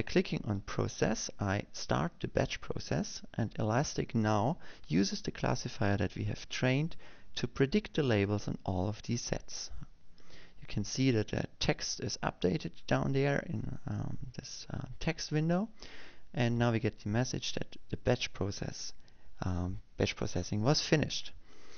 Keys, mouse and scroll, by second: 2.2 click.